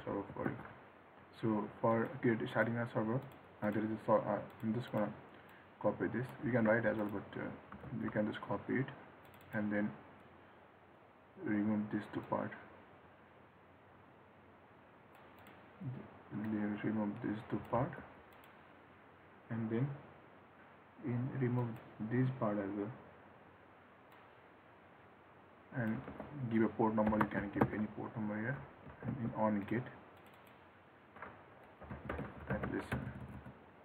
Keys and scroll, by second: 6.8 ctrl+c, 8.0 ctrl+v, 17.9 ctrl+x, 26.2 ctrl+x, 29.0 ctrl+s.